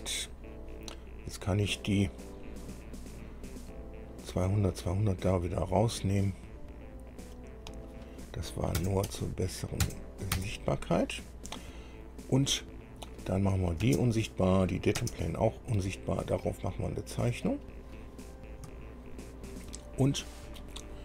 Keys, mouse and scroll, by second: 2.6 click, 4.9 click, 6.6 click, 8.1 click, 9.0 KP_0, 9.3 Tab, 10.1 KP_0, 10.6 KP_Enter, 13.7 click, 14.1 space, 14.7 click, 15.2 space, 16.1 click, 17.7 click, 19.0-20.6 shift+drag.